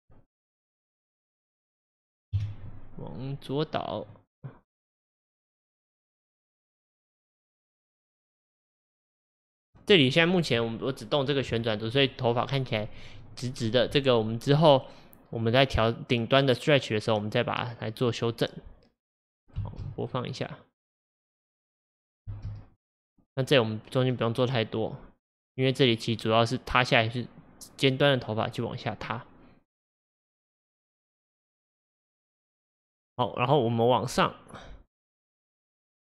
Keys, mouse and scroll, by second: 0.8 click, 2.4 KP_1, 4.2 click, 5.9 click, 6.5 click, 7.4 click, 19.2-19.6 scroll down 2, 19.6 space, 22.3 space, 22.8-25.8 drag.